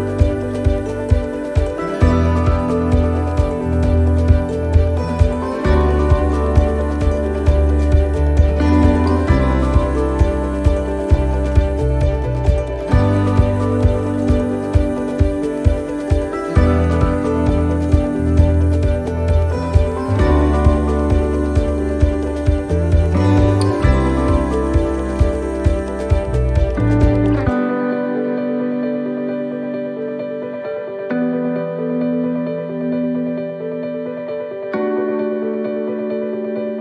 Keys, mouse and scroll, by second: 0.8 right click, 1.5 right click, 2.9 click, 4.2 click, 7.2 middle click, 7.9 shift+middle click, 8.4 scroll down 1, 8.8 middle click, 10.1 shift+middle click, 11.2 scroll down 2, 11.6 shift+middle click, 11.8 shift+middle click, 12.1 scroll down 1, 12.5 shift+middle click, 13.7 click, 14.7 right click, 17.1 middle click, 18.1-18.7 scroll up 2, 18.7 shift+right click, 21.1 click, 23.1 middle click, 23.5-23.8 scroll down 2, 23.9 shift+middle click, 24.4 middle click, 24.9-25.2 scroll up 1, 25.3 shift+middle click, 25.5 scroll down 3, 27.0 s, 28.8 middle click, 29.6 click, 32.6 middle click, 33.8 click, 34.6 middle click, 35.9 shift+middle click.